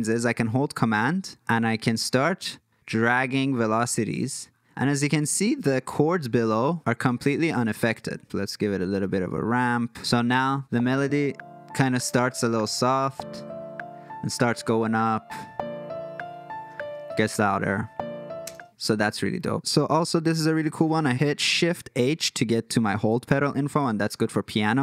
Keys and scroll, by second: 10.7 space, 18.5 space.